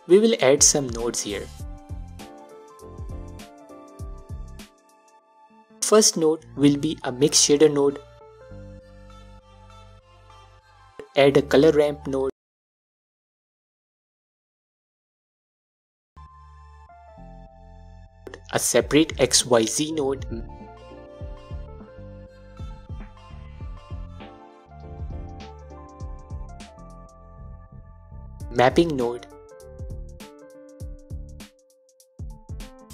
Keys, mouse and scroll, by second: 0.6-2.7 drag, 2.3-2.7 scroll up 2, 2.7-4.7 middle drag, 3.4-3.9 scroll up 2, 4.8 click, 5.6 shift+a, 9.9 click, 10.6 shift+a, 15.5 click, 15.8 scroll down 1, 16.1-17.2 middle drag, 17.4 click, 18.2 shift+a, 22.9 click, 23.3 middle click, 24.0 click, 25.0 shift+a, 30.8 click, 31.7 scroll down 1, 32.0 middle click, 32.6 scroll up 1.